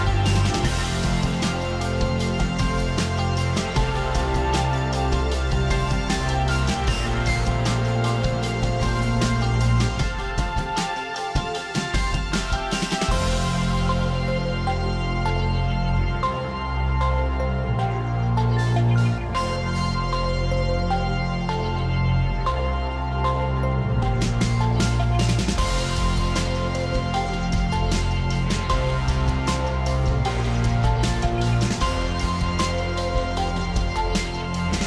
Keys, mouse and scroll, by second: 1.9 click, 3.2 click, 5.1 click, 10.9 click, 14.0 click, 15.8 click, 19.4 click, 21.1 shift+click, 22.6 ctrl+g, 24.2 click, 25.1 click, 26.9 click, 31.2 click, 33.6 click.